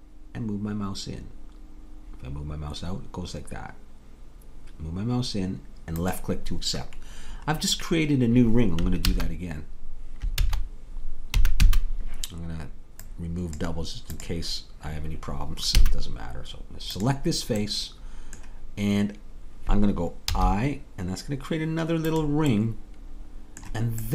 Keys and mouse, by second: 7.6-9.1 middle drag, 9.1 ctrl+z, 11.4 a, 13.4 middle click, 15.8 a, 20.3 i, 22.7-24.1 drag.